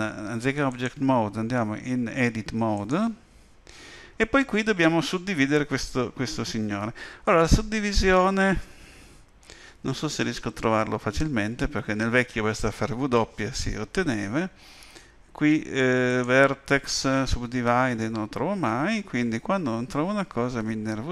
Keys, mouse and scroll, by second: 0.7 click, 16.1 click.